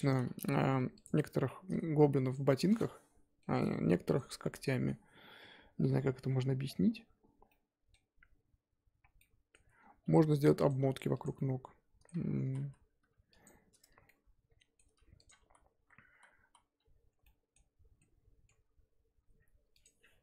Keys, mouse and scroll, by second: 0.1 scroll down 3, 0.4 g, 1.1-2.3 middle drag, 2.3 click, 2.7-4.1 middle drag, 4.1 click, 9.2 middle click, 9.7-10.0 scroll up 2, 10.0 x, 11.2 click, 11.3 middle click, 12.2 ctrl+z, 12.4 ctrl+z, 12.6 ctrl+z, 13.4 click, 14.0-15.3 middle drag, 15.3 click, 15.4 ctrl+z, 15.7 ctrl+z, 17.2 ctrl+z, 17.2 middle click, 17.6-18.0 scroll up 1, 18.0-20.2 middle drag.